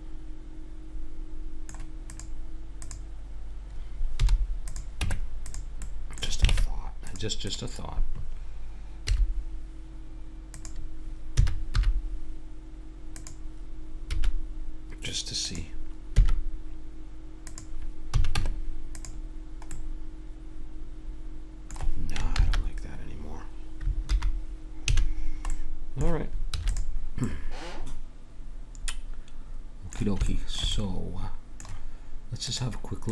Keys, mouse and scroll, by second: 0.6-2.1 middle drag, 2.1-5.8 drag, 4.2 h, 5.0 Tab, 5.8 middle click, 6.5 ctrl+Tab, 7.4-9.4 drag, 9.0 i, 11.3 s, 14.2 s, 16.1 e, 18.1 a, 18.3 Tab, 19.7 middle click, 22.4 ctrl+z, 24.1 alt+h, 24.9 a, 26.5 ctrl+s, 28.9 middle click, 30.3-32.6 middle drag.